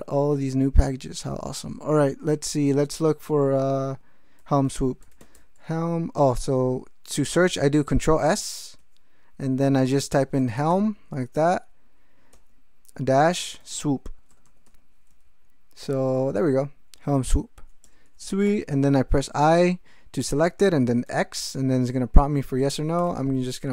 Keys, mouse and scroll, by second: 4.4 ctrl+s, 4.9-5.6 typing, 6.4 ctrl+g, 8.2 ctrl+s, 10.1-11.2 typing, 12.3 -, 13.4-15.1 typing, 15.2 ctrl+s, 17.8 Return, 18.5 i, 21.1 x, 22.7-23.6 typing.